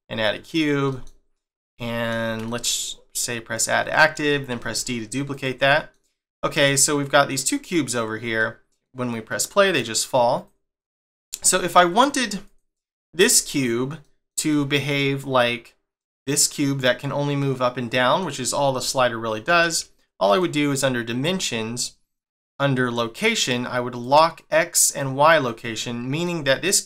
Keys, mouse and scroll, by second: 0.2 middle click, 0.9 g, 1.8 middle click, 3.5 click, 3.9 middle click, 4.5 d, 5.6 middle click, 6.4 middle click, 7.5 click, 8.4 middle click, 10.4 click, 10.8 click, 11.5 shift+middle click, 12.5 click, 12.8 middle click, 14.0 middle click, 14.5 middle click, 17.4 middle click, 20.3 click, 20.7 click, 24.0 click, 24.9 click, 25.8 middle click.